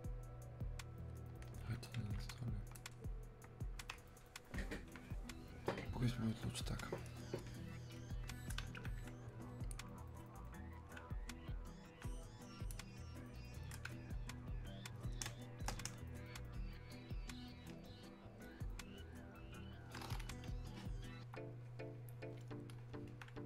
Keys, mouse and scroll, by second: 3.0-8.8 drag, 8.8-10.2 drag, 10.2-15.3 alt+drag, 15.3 space, 16.6 click, 16.7 space, 19.6 click, 22.9 click, 23.1 alt+click.